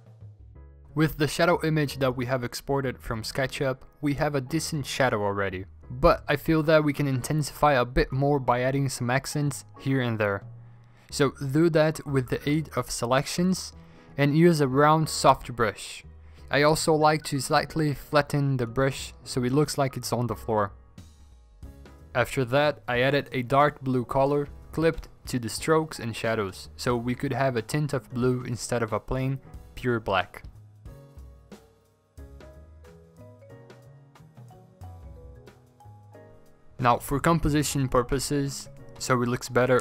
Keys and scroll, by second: 1.0 alt+Tab, 2.6 b, 3.7 i, 5.1 Delete, 5.2 Delete, 6.4-7.5 scroll, 7.7 m, 7.9 ctrl+z, 8.0 m, 8.9 ctrl+z, 9.1-9.4 scroll, 10.1 ctrl+z, 10.5 Escape, 10.6 Escape, 12.0-13.0 typing, 13.6 ctrl+z, 14.2 ctrl+z, 18.0-18.8 scroll, 18.0 ctrl+z, 19.5 Escape, 22.5-24.3 typing, 24.6 ctrl+z, 25.0 ctrl+z, 25.6 ctrl+z, 31.0 ctrl+alt+g, 32.8 alt+BackSpace, 33.5 v, 33.6 scroll down 5, 34.8 ctrl+alt+g, 36.3 v, 36.3 scroll down 10, 37.9 ctrl+alt+g, 38.0 ctrl+alt+g, 38.9 v, 39.0 scroll down 2.